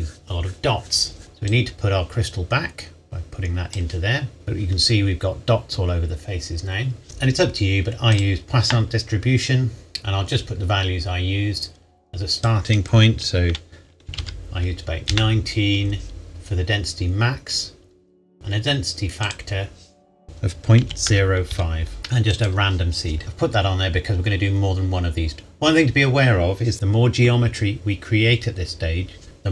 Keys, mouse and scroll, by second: 1.2 click, 1.8-2.6 drag, 4.4-6.2 scroll up 1, 7.0-7.7 scroll up 1, 8.1 click, 9.9-12.2 scroll up 1, 12.8 click, 14.1 KP_1, 14.2 KP_9, 15.1 KP_Enter, 19.3 click, 20.8 KP_Decimal, 21.1 KP_0, 21.5 KP_5, 22.0 KP_Enter, 22.3 click, 24.0-25.4 scroll down 1.